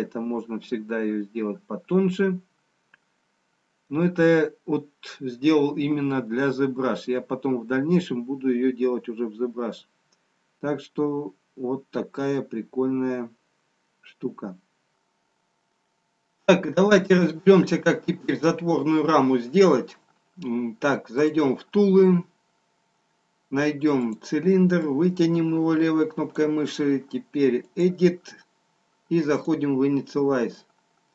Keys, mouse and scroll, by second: 4.7-6.1 scroll up 1, 6.1-7.0 scroll up 1, 7.0 middle click, 7.0-9.4 scroll down 1, 11.6 middle click.